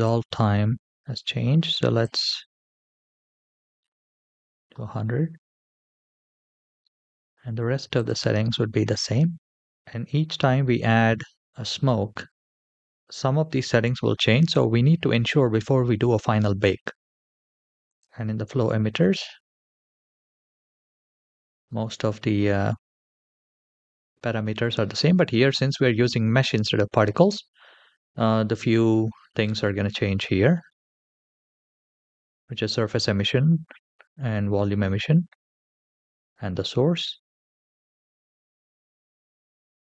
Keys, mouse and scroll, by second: 1.8-3.7 drag, 3.1 KP_0, 7.8 click, 8.8-9.5 scroll down 2, 17.7 click, 18.9-20.7 scroll down 5, 35.1-38.2 scroll down 2, 38.9 click.